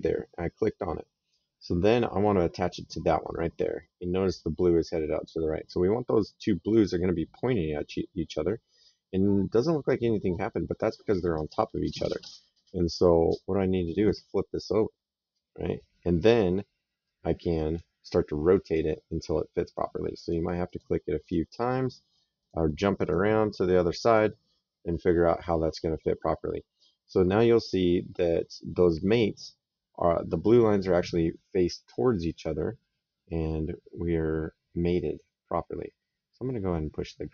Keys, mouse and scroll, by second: 6.5 click, 9.2 middle click, 13.8 click, 16.9 click, 18.5 click, 22.2 click, 27.5 middle click, 28.1 right click, 30.7 right click, 33.1 right click.